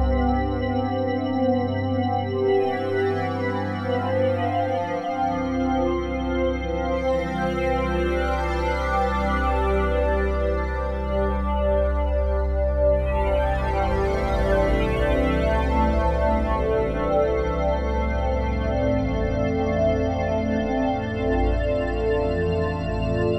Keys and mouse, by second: 0.9 Delete, 1.3 click, 2.2-4.2 typing, 5.5-7.9 drag, 7.2-8.1 typing, 8.4-9.9 drag, 10.0 click, 11.6 click, 12.4 click, 13.4-14.0 drag, 14.1-14.7 shift+drag, 14.1 typing, 15.1 ctrl+l, 16.2 Return, 16.6 ctrl+s, 17.3 click, 18.6-19.9 drag, 20.3 ctrl+s, 21.7-22.8 drag.